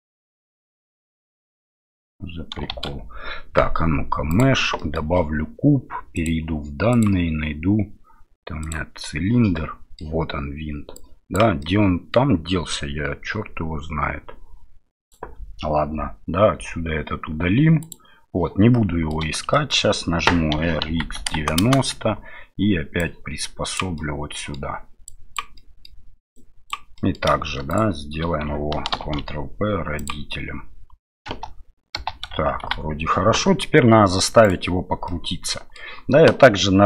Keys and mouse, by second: 0.2 Tab, 0.9 right click, 2.7 shift+a, 4.9 middle click, 7.0-8.7 drag, 9.7 middle click, 10.9 click, 11.8 middle click, 16.5 Delete, 17.9 click, 18.7 middle click, 19.5 shift+middle click, 20.5 r, 23.1 click, 24.0 middle click, 25.2 click, 25.6 middle click, 26.5 click, 27.1 middle click, 27.7 shift+right click, 28.9 ctrl+p, 31.3 space, 32.3 shift+space, 32.6 shift+Left, 34.4 right click, 35.1 middle click.